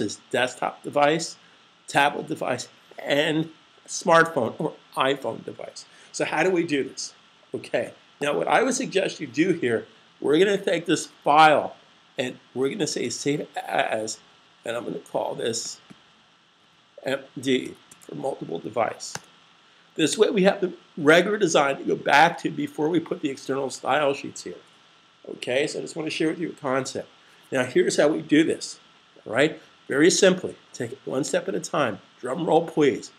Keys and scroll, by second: 12.9 shift+super+s, 14.2 Right, 16.4 typing, 17.5-18.0 typing.